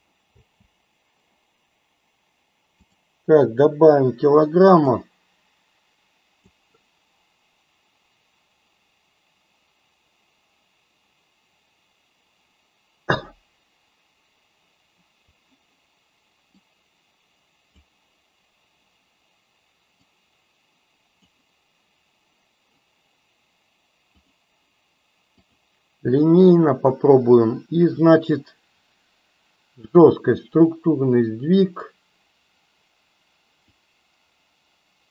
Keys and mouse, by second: 0.3 space, 2.7 click, 4.9-6.5 drag, 16.6-17.9 drag, 20.1-21.4 drag, 24.3-25.6 drag, 33.6-35.1 drag.